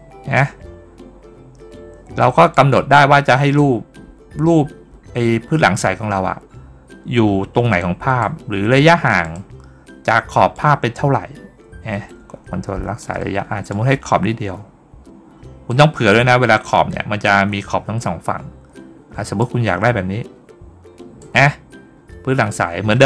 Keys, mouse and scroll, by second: 2.4-8.0 drag, 9.1 click, 10.4-12.8 drag, 13.5-15.5 drag, 19.2-21.0 drag.